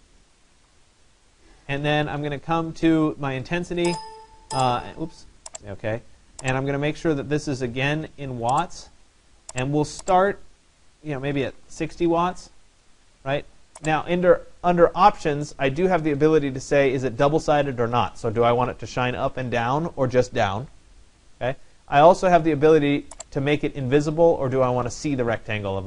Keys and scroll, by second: 0.0-1.3 typing, 11.1 6, 11.5 0.